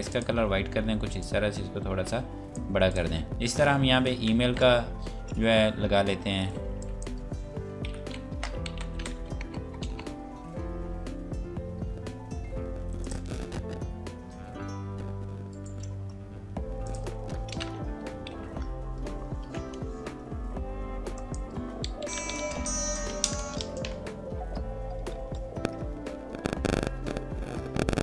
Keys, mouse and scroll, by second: 1.2 shift+click, 2.9 click, 4.3 alt+Tab, 6.8 click, 7.8-9.4 typing, 9.7 Return, 13.0 click, 15.5 right click, 16.9 click, 17.2 alt+Tab, 18.4 ctrl+v, 21.1 click, 22.1 KP_5, 22.1 Tab, 22.2 KP_5, 25.1 KP_Enter, 25.8 scroll down 1.